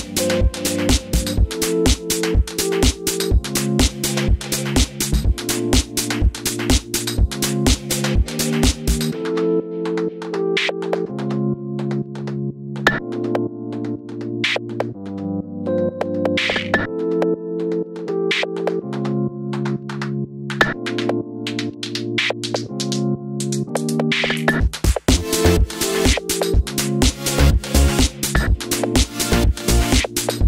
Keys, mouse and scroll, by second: 1.0 click, 1.2-3.8 middle drag, 2.1 g, 3.8 click, 3.9-6.2 middle drag, 5.6 r, 6.2 click, 6.3 g, 7.3 click, 7.4-9.1 middle drag, 8.2 g, 9.1 click, 9.1-10.8 middle drag, 9.8 g, 10.8 click, 10.9-14.1 middle drag, 11.9 alt+d, 14.1 click, 14.5-17.4 middle drag, 16.2 alt+d, 17.4 click, 17.7 alt+d, 20.5 click, 20.5 s, 21.3 click, 22.0 s, 22.9-26.0 middle drag, 25.7-26.0 scroll up 2, 26.0 click, 27.1-28.3 middle drag, 27.6 g, 28.3 click, 28.6 r, 29.5 click, 29.5 g, 30.4 click.